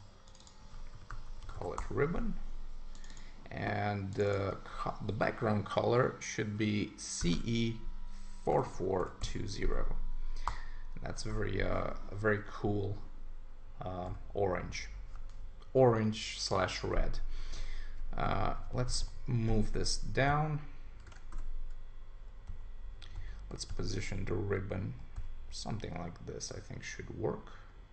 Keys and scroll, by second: 1.8 Return, 10.4 Return, 18.5 Down, 21.1 super+1, 22.5 Down.